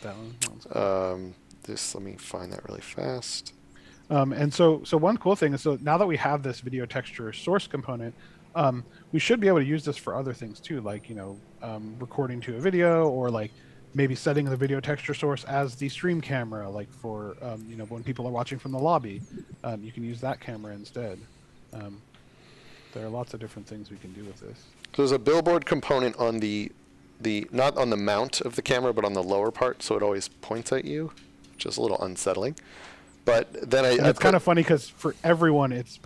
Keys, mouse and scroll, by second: 0.6-1.2 scroll down 1, 1.2-2.1 scroll up 1, 2.4 click, 3.7-4.7 scroll down 1, 4.8-8.6 scroll up 1, 10.5-11.7 scroll up 1, 11.7-13.9 scroll down 1, 14.3 click, 21.7 shift+click, 22.5 shift+scroll, 23.1-23.8 shift+scroll, 24.9 shift+scroll, 28.1 click, 29.1 a, 30.5 a, 31.1 d, 32.7 d, 34.2 s, 35.7 a.